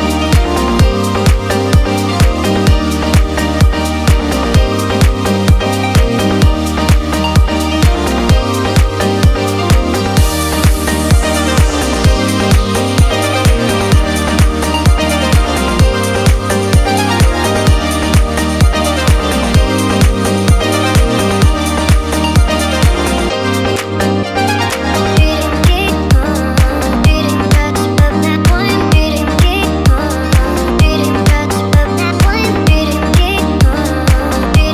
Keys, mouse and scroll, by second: 0.4 click, 1.3 shift+click, 1.8 shift+click, 2.3 shift+click, 3.1 shift+click, 5.1 i, 6.3 click, 7.2-8.3 drag, 11.7 click, 11.7 i, 12.6 click, 13.4 click, 14.7 middle click, 15.3-15.9 scroll down 1, 16.2 click, 17.9-19.5 drag, 20.9-23.9 middle drag, 27.7 click, 28.8 shift+click, 30.5 i, 31.8 click, 32.7 click.